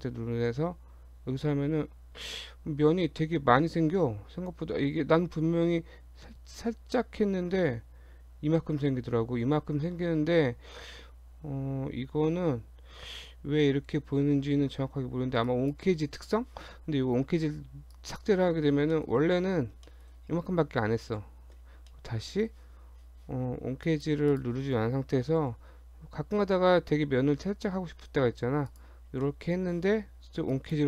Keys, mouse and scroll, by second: 0.5 ctrl+b, 17.9 click, 18.9 middle click, 19.1-19.7 scroll up 3, 19.9 shift+middle click, 20.3-20.8 scroll up 2, 21.0 ctrl+z, 21.6 scroll down 2, 21.9 middle click, 21.9 scroll up 1, 23.9 click, 24.3 click, 25.4 ctrl+b, 29.1 scroll down 2, 29.2 middle click, 30.5 click.